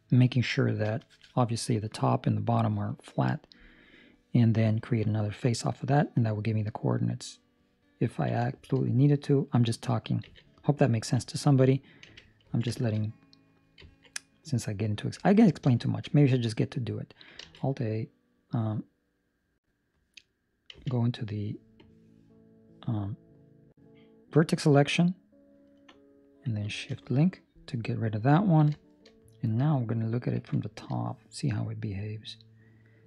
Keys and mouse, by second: 7.1 middle click, 8.0 ctrl+middle click, 8.4 shift+middle click, 10.2 z, 10.9 ctrl+middle click, 12.0 1, 12.5 ctrl+middle click, 12.9 shift+middle click, 13.3 middle click, 13.8 ctrl+middle click, 14.1 middle click, 15.4 ctrl+middle click, 15.7 shift+middle click, 17.3 alt+a, 21.7 click, 21.7 z, 26.8 shift+l, 28.4 ctrl+middle click, 28.7 shift+middle click, 29.0 middle click, 30.3 KP_7, 31.0 shift+middle click, 31.9 click.